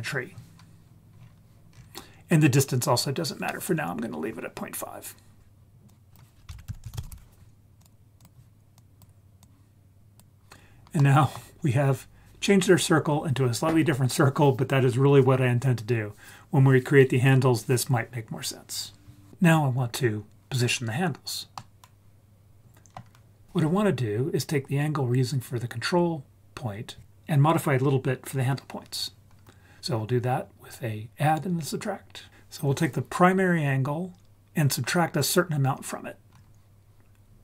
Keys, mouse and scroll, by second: 1.1-1.8 scroll down 3, 1.7-4.4 scroll up 2, 5.9 click, 6.5 shift+a, 6.8 s, 8.7 drag, 9.4-10.2 drag, 11.0-11.3 middle drag, 11.7-14.0 scroll up 2, 21.6-23.0 middle drag.